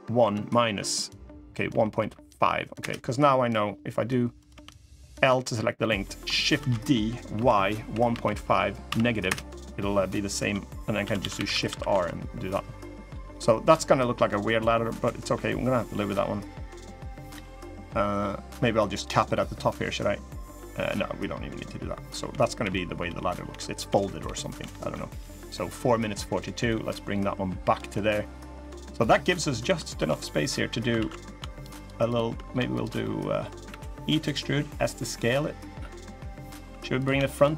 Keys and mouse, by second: 4.1 click, 4.3 l, 5.0 middle click, 5.5 middle click, 6.3 shift+d, 10.7 shift+r, 11.1 shift+r, 11.3 shift+r, 11.4 shift+r, 11.8-12.8 middle drag, 13.0-14.1 middle drag, 14.9 middle click, 15.7 middle click, 16.6 middle click, 17.6 middle click, 18.7 click, 19.0 middle click, 20.3 middle click, 21.9-24.3 typing, 24.6 middle click, 26.4-27.5 drag, 27.6 middle click, 29.0 middle click, 29.7 shift+d, 30.7 ctrl+z, 31.3 shift+click, 31.6 shift+click, 31.8 shift+click, 32.7 click, 33.4 e, 34.2 s, 35.5 click, 36.4 3, 37.1 shift+click, 37.4 shift+click.